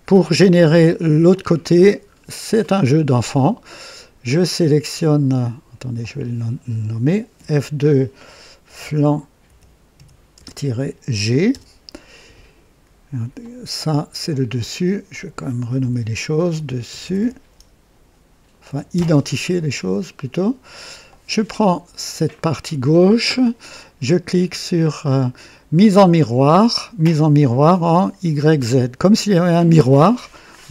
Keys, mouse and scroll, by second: 0.4 right click, 1.3-1.8 drag, 2.0 scroll down 2, 2.4-3.1 right drag, 5.0 click, 5.9 click, 7.3 F2, 8.3-11.1 typing, 11.4 Return, 13.3 click, 15.0 click, 15.7-18.8 typing, 21.0 click, 25.7 click.